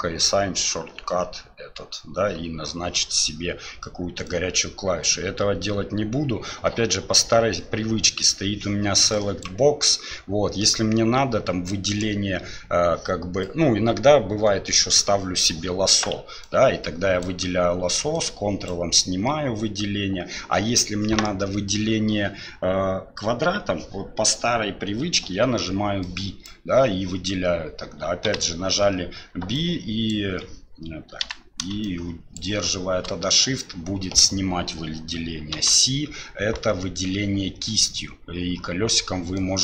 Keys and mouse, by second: 4.4-7.1 drag, 9.2 drag, 11.9 click, 13.4-15.0 drag, 16.5-17.2 drag, 18.2-18.7 ctrl+drag, 25.2 b, 31.2 b, 35.5 c.